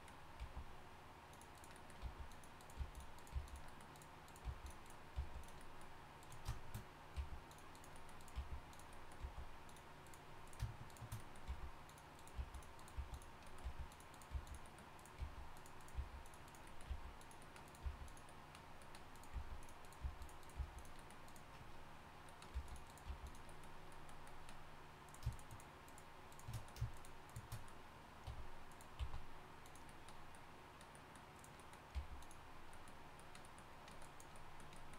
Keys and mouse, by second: 0.4 g, 2.0 g, 2.8 g, 3.3 g, 4.4 g, 5.1 g, 7.1 g, 8.3 g, 9.2 g, 11.5 g, 12.3 g, 12.8 right click, 13.6-17.8 typing, 14.7 right click, 19.3 g, 20.0 g, 20.6 g, 22.5 g, 23.0 g, 25.0-29.0 drag, 28.2 e, 29.0 s, 31.3-32.5 right drag, 31.9 g, 32.5 click, 34.0 click.